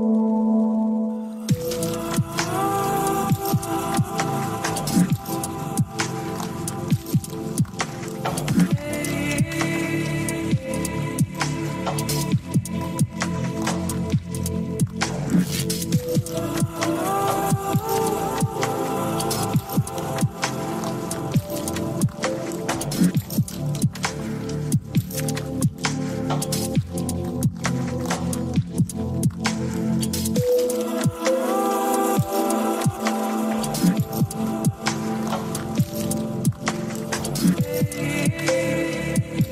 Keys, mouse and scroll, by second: 0.4 click, 2.0 click, 2.9 click, 4.0 click, 4.3-6.0 right drag, 9.0 click, 12.1 click, 12.7-14.7 right drag, 16.6-17.7 drag, 19.0 click, 21.8 click, 24.0-26.1 drag, 29.4-31.4 scroll down 6, 31.4 click, 34.5-35.8 drag, 36.7 click, 38.8-39.5 drag.